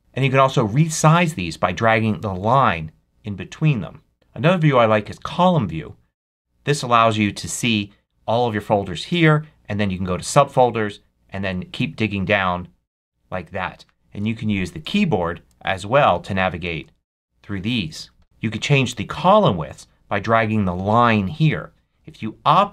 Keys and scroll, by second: 14.7 Right, 15.5 Left.